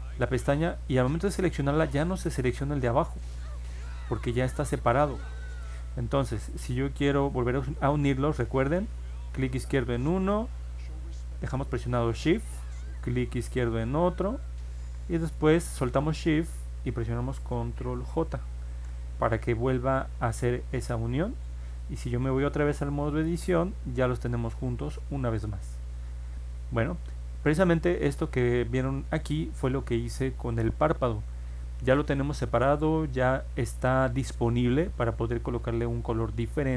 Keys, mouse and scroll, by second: 3.5 click, 9.8 click, 13.6 shift+click, 20.4 click, 21.6 click, 22.6 ctrl+Tab, 26.3 ctrl+Tab, 30.1 click.